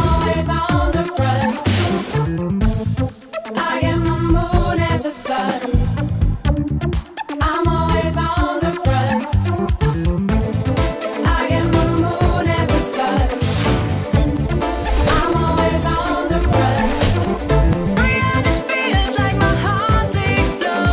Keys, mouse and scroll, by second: 1.8 right click, 2.9 right click, 6.2-7.4 drag, 7.4 right drag, 7.6-10.4 drag, 11.3 right drag, 12.3 right click, 13.9 right drag, 15.0-15.4 right drag, 16.2 right click, 18.1-20.9 drag.